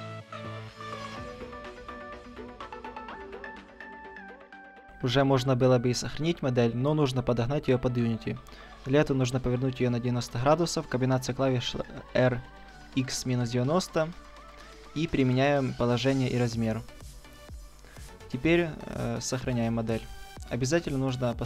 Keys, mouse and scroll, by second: 0.2 middle drag, 1.7 a, 1.9 a, 2.6 ctrl+e, 3.7-5.3 middle drag, 3.9 a, 6.4 Tab, 6.9-7.5 middle drag, 8.9 r, 13.1-15.6 middle drag, 15.6 ctrl+a, 18.6 click.